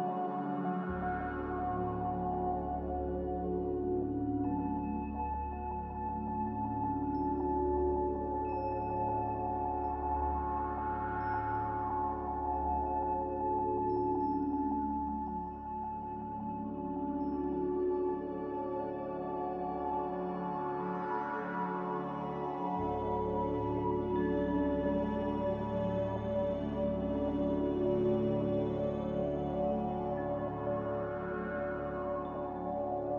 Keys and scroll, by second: 3.2 ctrl+z, 7.7 z, 9.3-10.1 typing, 20.4-21.3 typing.